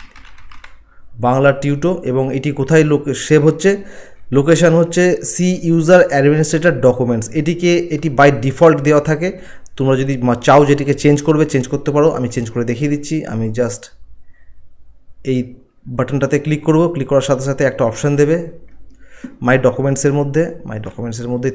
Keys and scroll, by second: 0.0-0.5 typing.